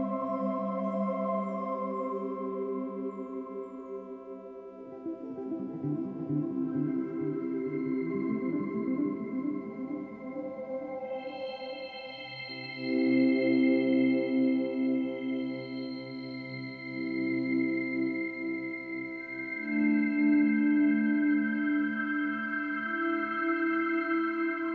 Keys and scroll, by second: 11.1 Delete, 14.2 Delete, 17.5 Delete.